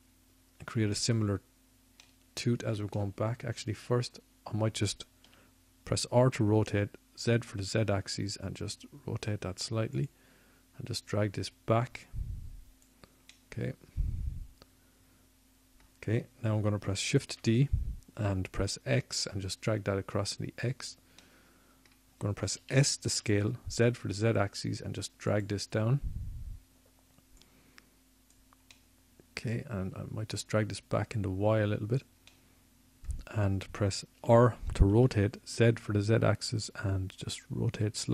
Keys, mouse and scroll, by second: 0.0 l, 7.3-9.0 middle drag, 10.4 r, 15.2-17.4 drag, 18.5 middle click, 19.8 middle click, 22.3 shift+d, 25.8-27.6 drag, 27.6 s, 30.8-33.7 drag, 34.3-37.2 drag, 37.3 click.